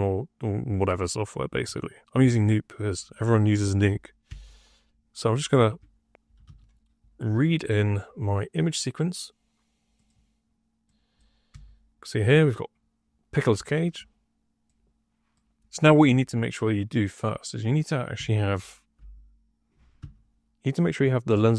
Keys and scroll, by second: 4.2 Tab, 5.5 Tab, 6.0-6.9 typing, 11.4 1, 18.1 Tab, 18.9 l, 19.9 d.